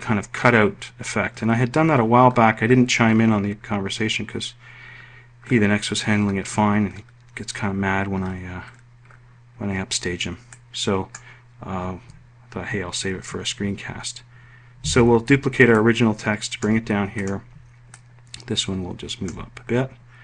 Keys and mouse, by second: 14.7 ctrl+d.